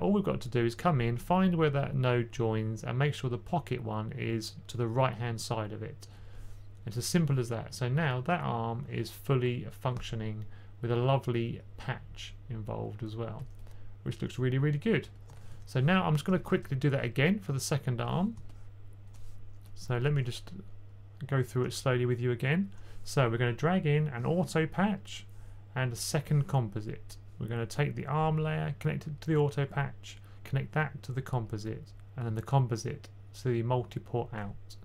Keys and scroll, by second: 16.1 typing, 19.5-20.3 typing.